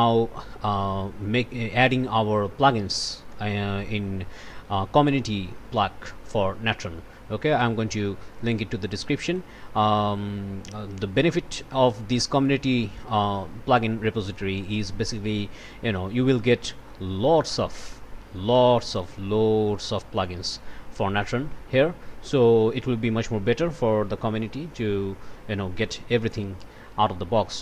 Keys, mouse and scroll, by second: 0.3 scroll up 1, 7.5 click, 8.3 click, 9.2 click, 10.3 scroll up 1, 12.0 scroll up 1, 14.5 scroll down 1, 16.0 scroll down 1, 16.9-18.7 scroll down 1, 20.5-22.8 drag.